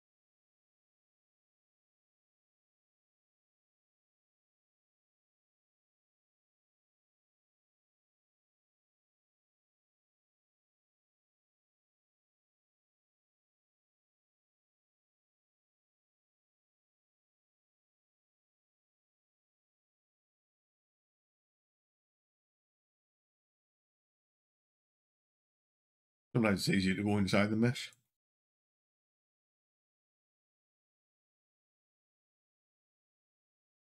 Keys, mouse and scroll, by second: 30.1 shift+click, 31.5 click.